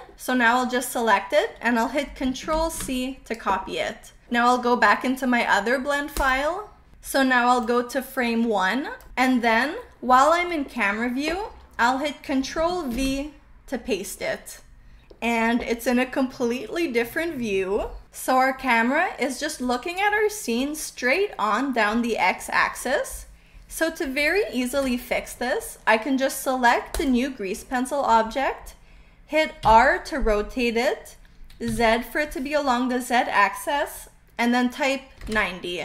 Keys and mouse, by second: 2.4 ctrl+c, 6.0 click, 13.0 ctrl+v, 15.8-17.6 middle drag, 20.7 middle click, 24.6 KP_0, 29.5 r, 31.6 z, 35.1 KP_9, 35.2 KP_0.